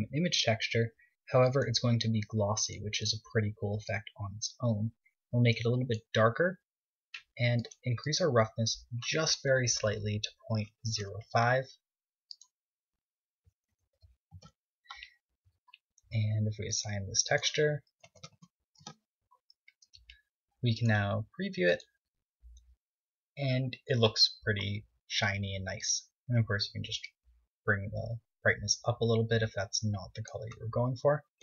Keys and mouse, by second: 13.0-14.8 drag, 16.0 Tab, 16.7 Tab, 17.3-19.8 drag, 19.2 s, 20.3 Tab, 22.3 click.